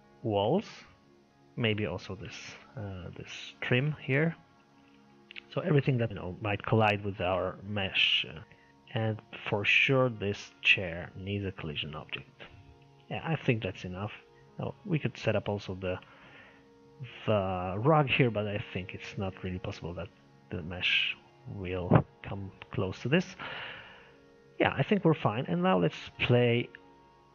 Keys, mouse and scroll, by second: 4.6 click, 5.3-9.8 middle drag, 9.8 click, 11.0 click, 12.6-20.2 middle drag, 20.2-20.6 scroll down 2, 20.6-24.9 middle drag, 24.9-25.5 scroll up 1, 25.5-27.3 shift+middle drag.